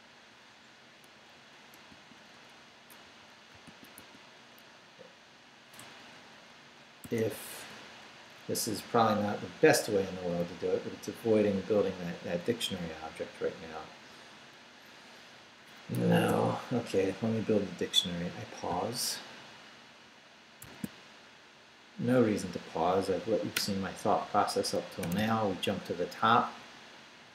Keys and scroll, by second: 1.9-4.5 typing, 2.3 Return, 5.8-7.7 typing, 16.0 Escape, 16.3 u, 20.6 alt+shift+super+z, 25.0 shift+g, 26.0 Down.